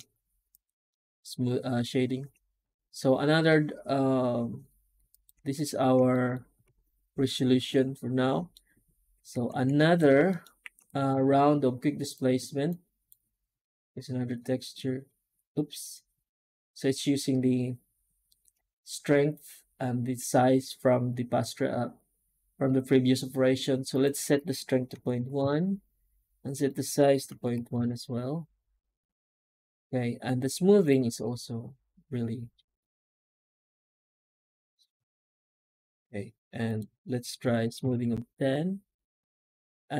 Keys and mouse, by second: 0.4-0.8 right drag, 0.8-1.1 middle drag, 5.0 click, 5.2 Tab, 6.0 shift+middle click, 6.5 alt+a, 7.5 middle click, 9.0 a, 9.3 Tab, 9.6 middle drag, 10.1 shift+middle drag.